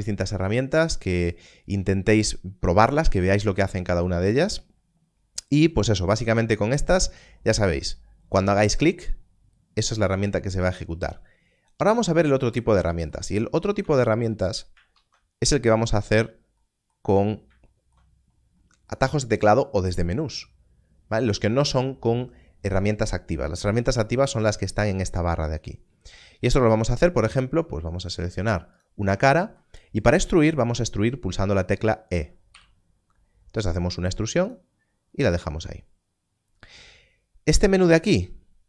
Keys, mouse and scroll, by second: 11.8 click, 13.2 scroll down 1, 13.7 Tab, 14.1 x, 14.9 shift+a, 16.1 click, 17.0 scroll down 1, 18.0-20.0 scroll down 1, 21.4 Tab, 26.8 Tab, 26.8 click, 29.6 scroll down 1, 32.5 e, 38.0 click.